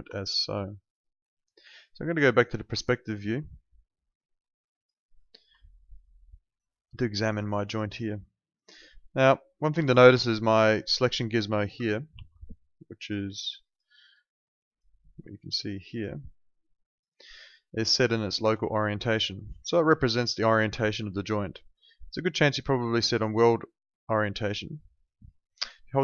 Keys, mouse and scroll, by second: 0.2 alt+middle click, 3.1 click, 5.6 alt+right click, 6.3 alt+middle click, 6.5 alt+right click, 6.8 alt+click, 7.6 alt+middle click, 7.8 alt+right click, 8.1 alt+click, 8.7 alt+middle click, 9.8 alt+click, 12.1 ctrl+2, 18.4 Escape, 19.6 alt+click, 21.3 alt+middle click, 21.5 alt+right click, 21.8 alt+click, 22.0 alt+right click, 22.4 alt+click, 22.8 alt+middle click, 23.0 alt+right click, 24.4 ctrl+right click.